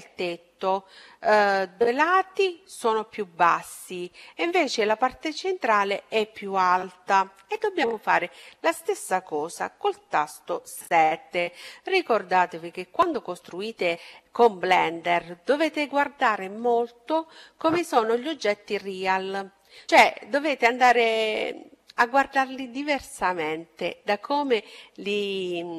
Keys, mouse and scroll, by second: 10.7 KP_7.